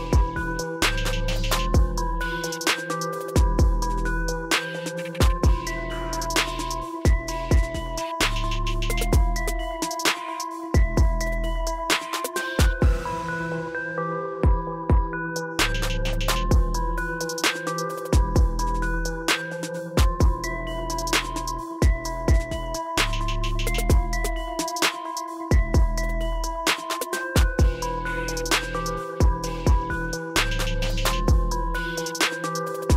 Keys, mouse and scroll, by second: 4.0-7.6 drag, 21.7-25.2 drag.